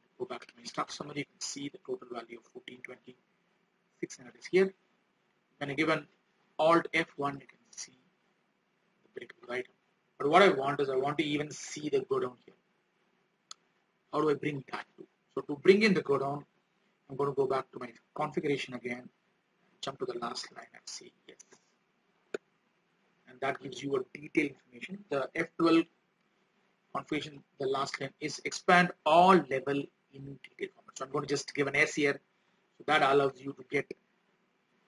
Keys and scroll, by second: 26.4 F12, 33.3 ctrl+a.